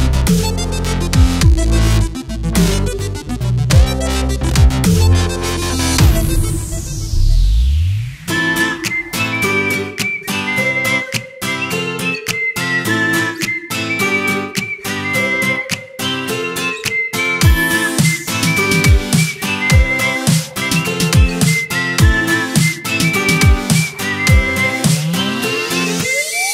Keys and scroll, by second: 4.1 space, 4.5 v, 8.7-10.2 typing, 12.1 v, 12.6 z, 12.9 shift+m, 13.8 v, 14.4 Delete, 15.4 z, 16.2 space, 17.7 space, 18.2 m, 20.6 v, 22.5 ctrl+shift+[.